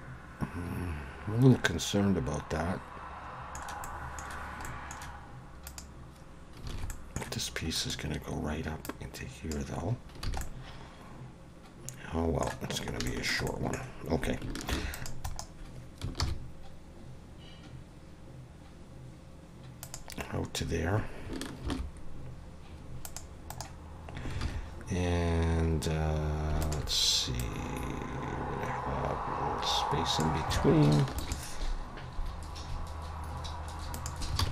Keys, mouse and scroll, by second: 3.8 middle click, 4.7 middle click, 5.7 click, 6.7 alt+a, 6.7 alt+s, 6.9 middle click, 7.8 click, 8.8 click, 9.9 scroll down 1, 10.3 alt+a, 10.4 middle click, 12.8 scroll up 2, 13.1 shift+middle click, 13.5 middle click, 13.8 scroll down 2, 14.7 ctrl+r, 16.2 ctrl+b, 20.6 scroll up 1, 21.7 ctrl+r, 24.4 alt+a, 26.6 alt+shift+click, 27.4 click, 30.6 alt+a, 31.2 ctrl+r, 34.4 alt+a.